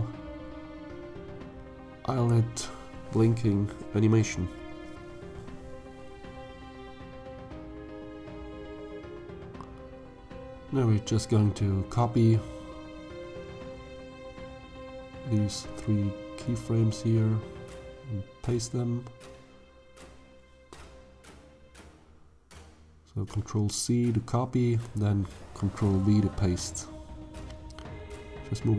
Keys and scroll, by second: 2.0 Tab, 19.2 ctrl+v, 24.3 ctrl+c.